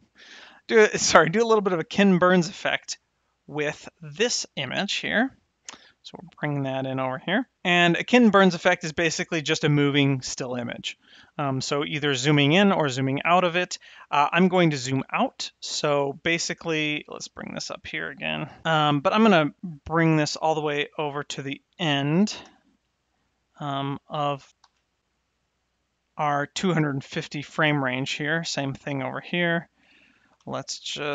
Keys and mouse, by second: 16.9 g, 17.1 y, 20.8-21.9 drag, 22.4 shift+Right, 23.8 click, 24.5 shift+s, 25.2 click, 29.1 click, 30.3 Home.